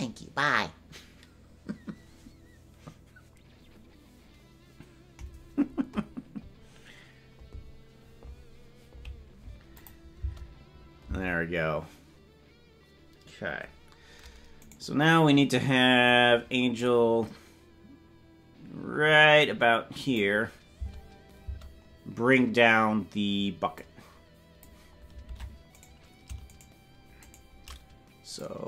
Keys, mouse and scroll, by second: 9.8 click, 10.1 space, 11.1 space, 14.7-16.1 right drag, 16.1-20.2 drag, 21.5 space, 23.8 click, 25.3 ctrl+Tab, 25.8 right click, 26.5-28.4 shift+right drag, 28.4-28.6 drag.